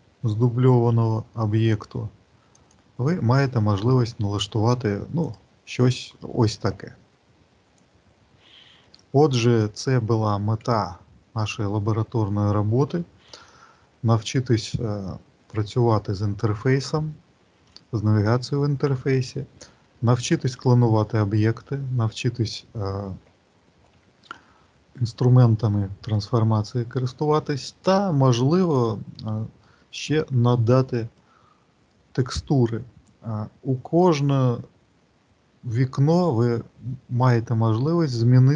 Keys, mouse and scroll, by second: 5.1 click, 6.7-7.4 scroll down 2, 14.2 middle click, 16.7 shift+middle click, 17.9 middle click, 19.7 shift+middle click, 30.9 click.